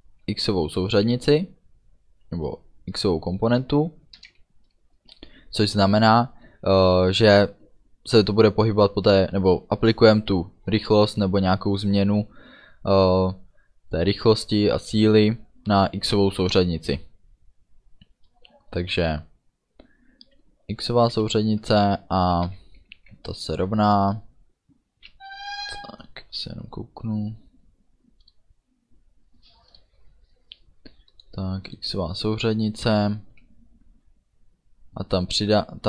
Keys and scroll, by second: 4.3 Return, 5.0 space, 21.2 space, 21.5 BackSpace, 22.5 =, 23.2 space.